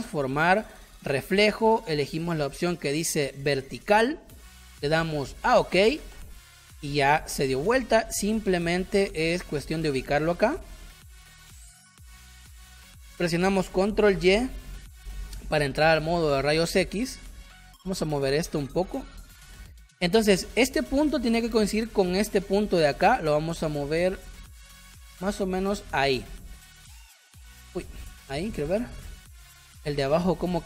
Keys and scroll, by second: 14.0 ctrl+y, 28.2 space, 29.8 space.